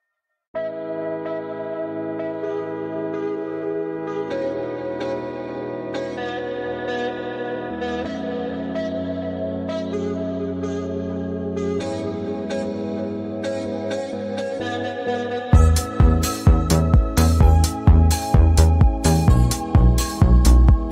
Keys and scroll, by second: 2.0 space, 4.7 space, 20.8 ctrl+2.